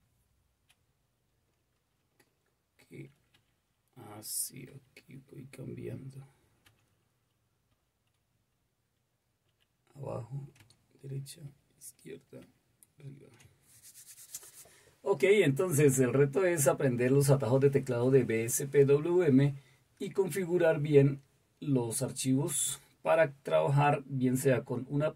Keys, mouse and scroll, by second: 3.3 super+h, 4.6 super+l, 5.8 super+k, 6.6 super+h, 7.7 super+l, 8.3 super+k, 9.4 super+j, 10.5 super+h, 11.4 super+l, 12.4 super+k.